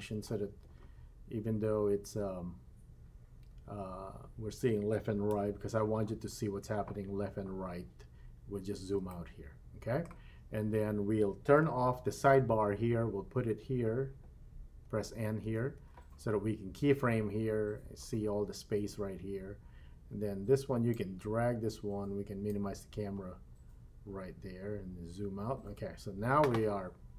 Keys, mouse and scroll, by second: 5.3 KP_3, 8.2-9.0 scroll down 3, 9.1-10.1 shift+middle drag, 12.5 n, 14.8 n, 15.4 n, 15.7 n, 20.9-22.6 drag, 23.4-24.0 scroll down 1, 24.8-25.1 scroll up 2, 25.1-25.5 scroll down 2.